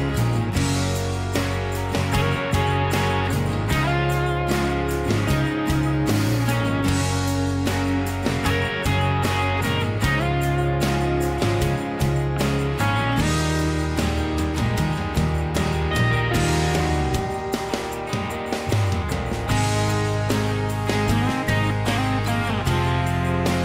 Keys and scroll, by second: 1.2 ctrl+a, 2.1 Escape, 2.2 Escape, 2.3 Escape, 2.7 h, 3.9-8.1 typing, 12.7-13.8 typing, 15.7 typing, 17.4-19.1 typing, 19.5 ctrl+g, 21.0 typing, 21.3 Return, 22.1 m.